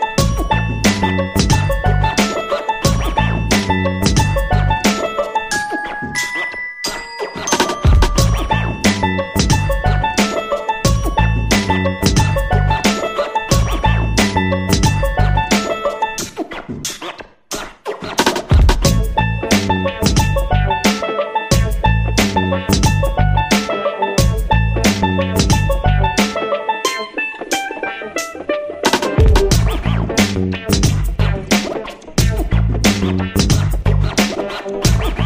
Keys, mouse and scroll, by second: 0.6 click, 1.7 middle click, 3.3 middle click, 4.1 KP_1, 7.1 click, 9.5 click, 15.2 click, 16.6 click, 26.0 click, 28.9 ctrl+middle click, 30.9 click, 32.9 shift+middle click.